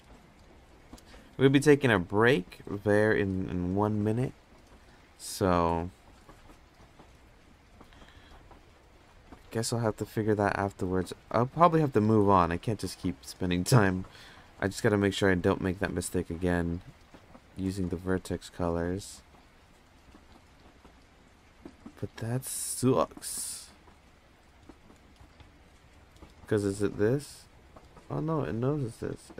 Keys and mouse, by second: 1.7 click, 3.1 click, 7.1 click, 7.7 click, 8.5 click, 9.2-10.2 drag, 15.3 click, 15.7 click, 16.1 click, 23.4 click, 25.3 click, 26.4 click, 27.0 click, 27.3 click, 27.6 click, 27.9 click, 28.1 click, 28.4 click, 28.9 click, 29.2 click.